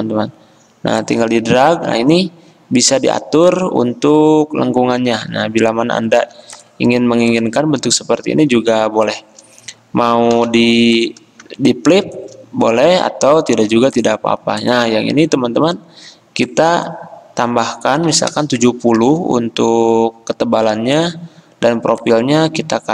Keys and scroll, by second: 6.3 v, 10.4 o, 13.6 v, 18.2 typing, 19.1 Return, 20.1-20.8 typing.